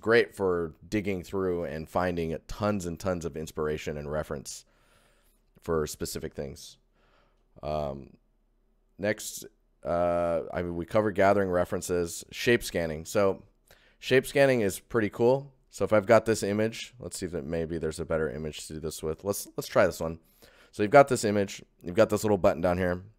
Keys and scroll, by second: 6.8 ctrl+shift+1, 7.3 ctrl+shift+1, 12.6 ctrl+shift+1, 13.6 shift+1.